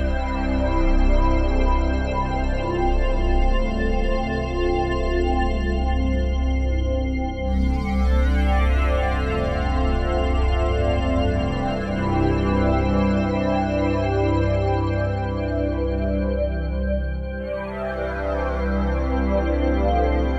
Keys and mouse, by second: 0.0-1.8 drag, 2.1-4.7 ctrl+alt+drag, 5.1 ctrl+alt+click, 5.7 alt+click, 6.6-8.3 alt+drag, 9.0 alt+click, 9.5 ctrl+alt+click, 10.5 click, 11.1 shift+click, 11.6 shift+click, 12.5 click, 13.1-15.6 shift+drag, 16.1 shift+click, 17.3 g, 17.7 z, 18.6 Escape, 19.8 click.